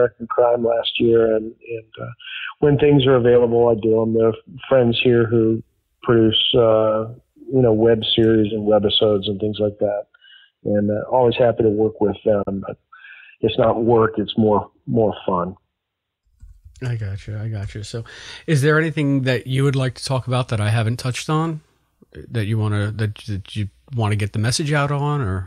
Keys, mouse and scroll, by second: 1.0 ctrl+s, 5.0 click, 6.5 click, 7.3 click, 7.9-9.0 drag, 9.8 click, 11.0-12.2 drag, 12.3 Delete, 13.3 click, 22.0-24.5 drag, 24.8 click.